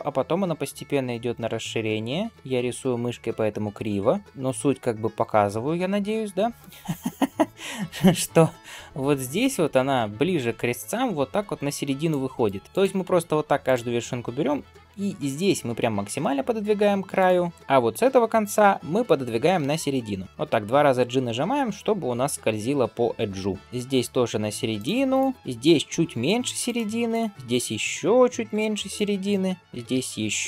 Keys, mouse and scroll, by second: 12.3 right click, 12.3 d, 12.6 click, 13.5-16.6 drag, 17.0 click, 19.1 g, 23.6 click, 23.6 g, 24.9 click, 26.9 click, 27.3 g, 29.1 click, 29.6 g.